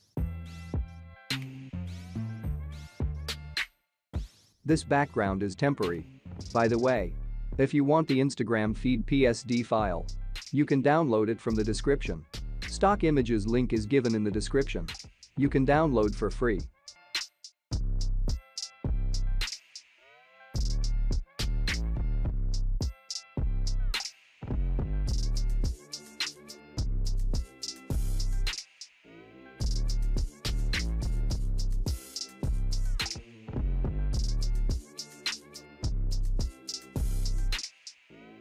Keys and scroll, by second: 18.5 ctrl+t, 23.5 ctrl+0.